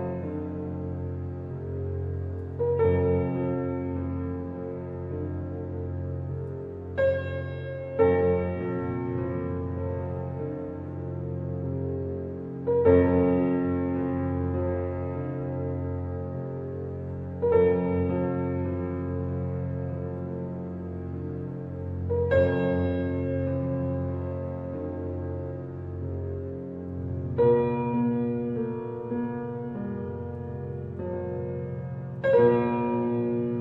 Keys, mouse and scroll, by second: 0.5-0.9 scroll up 2, 0.9 shift+middle click, 1.4-1.9 scroll up 1, 1.9-2.3 scroll down 3, 2.3-3.8 middle drag, 3.8-5.3 drag, 5.3-5.9 scroll down 1, 5.9 middle click, 6.6 click, 8.6 s, 11.7 Tab, 13.6 click, 14.6 click, 15.1 click, 16.4 alt+h, 17.2-17.7 middle drag, 17.7 click, 19.2 click, 21.1 shift+h, 22.5 click, 23.3 click, 24.3 click, 25.1 click, 26.7-27.4 middle drag, 27.4 click, 29.1 click, 30.0 click, 30.2-33.3 drag.